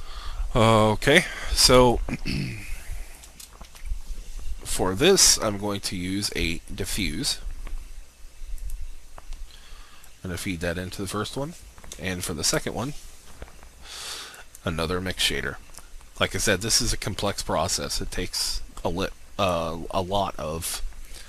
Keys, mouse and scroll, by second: 1.9 alt+shift+click, 3.6 shift+a, 6.8-11.9 drag, 12.4 shift+a, 14.3-20.0 drag, 20.5-21.1 scroll down 1, 21.1 scroll up 1.